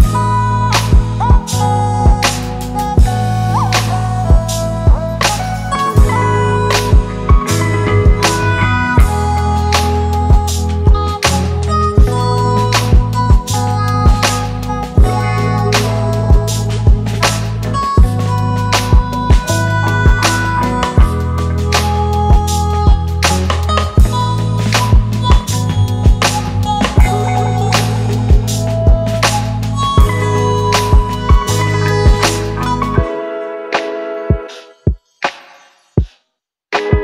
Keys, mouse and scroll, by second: 0.9 double click, 12.0 double click, 32.2-32.9 typing, 36.8 double click.